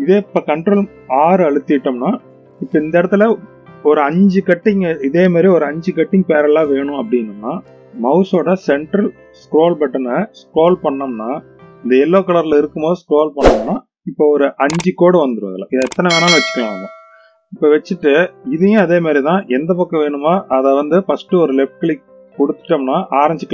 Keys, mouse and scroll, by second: 1.5 ctrl+r.